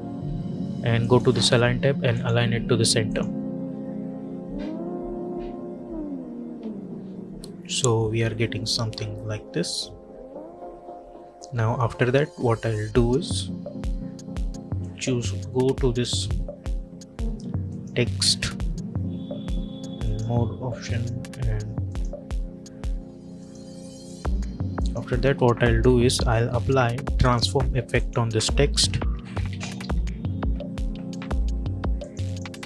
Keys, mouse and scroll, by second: 0.9 click, 14.7 click, 17.5 click, 20.2 click, 28.8-30.2 typing, 32.2 click.